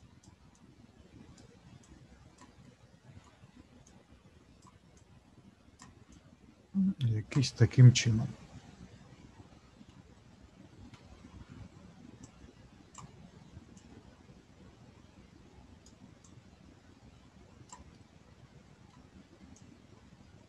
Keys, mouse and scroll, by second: 2.6 middle click, 3.8 click, 5.0 click, 6.1 click, 8.0 middle click, 12.2 click, 17.9 middle click, 19.5 click.